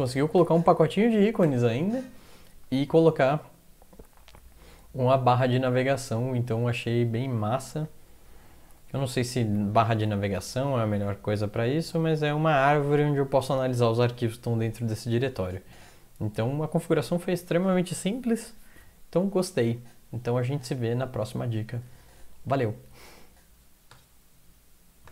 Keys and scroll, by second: 0.4 ctrl+\, 1.4 ctrl+\, 2.6 Down, 3.1-7.9 Down, 8.7 Up, 8.9 Up, 9.1 Up, 9.5 Up, 10.1 Down.